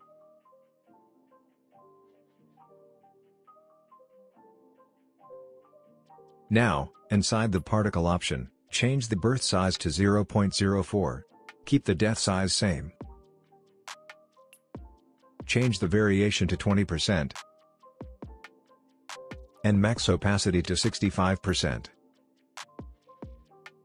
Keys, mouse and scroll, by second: 4.9 click, 7.9 click, 10.7 Return, 12.7 click, 17.4 Return, 20.6 click, 22.6 Return.